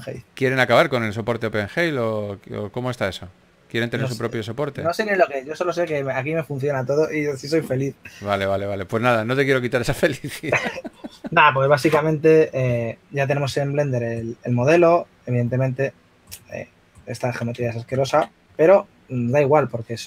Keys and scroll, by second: 14.7 Tab, 18.7 Tab.